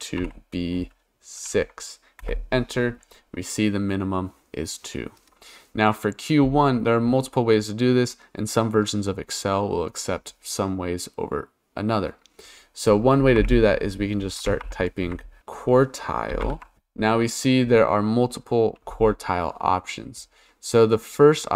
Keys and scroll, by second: 0.2 shift+b, 1.4 6, 2.2 Return, 13.4-17.0 typing.